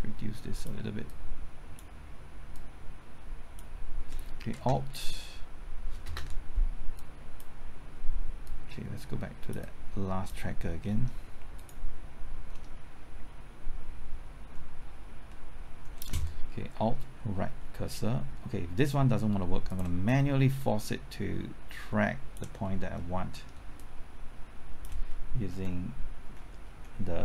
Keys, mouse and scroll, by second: 1.1-2.1 drag, 2.1-4.1 drag, 4.1 click, 4.5 space, 6.1 space, 6.9-9.6 drag, 9.6 click, 10.8 middle click, 11.5 click, 12.5-15.1 middle drag, 16.7 typing, 17.4 alt+Right, 19.7-22.6 drag, 22.6-22.9 scroll down 1, 22.9 middle click, 23.7-25.1 drag, 25.5 Left, 26.2-27.2 typing.